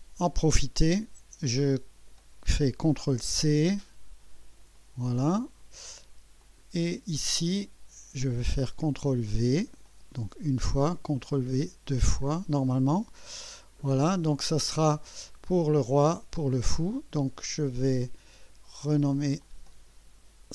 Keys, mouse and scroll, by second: 1.7 click, 3.1 ctrl+c, 4.8 click, 5.4-6.0 scroll down 2, 6.4 click, 9.0 ctrl+v, 9.9-10.5 drag, 11.3 ctrl+v, 12.0-12.4 scroll down 2, 19.4 click.